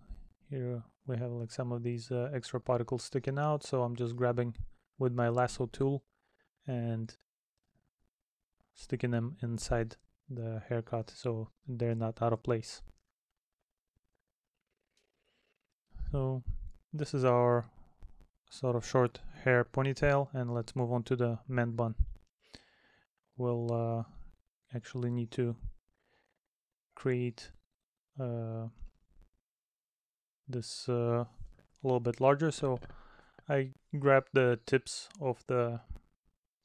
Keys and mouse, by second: 0.8 middle click, 3.9 middle click, 4.5 middle click, 6.3 middle click, 7.7 middle click, 9.1 middle click, 13.2 middle click, 14.4 middle click, 15.6 middle click, 17.7 middle click, 19.5 middle click, 24.8 middle click, 30.9 middle click, 31.6 middle click, 32.6 middle click.